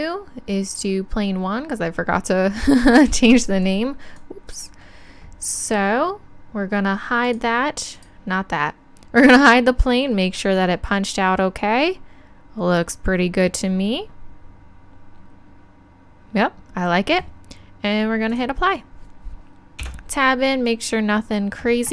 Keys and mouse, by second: 3.6-5.5 drag, 7.2-11.1 drag, 11.1-18.3 middle drag, 18.3-19.9 drag, 19.9 Tab.